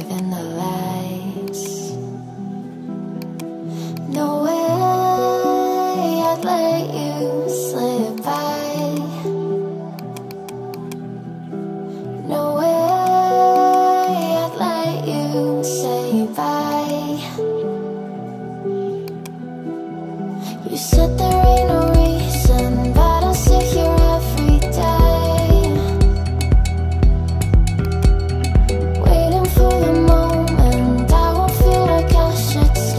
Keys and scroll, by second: 5.7 ctrl+z.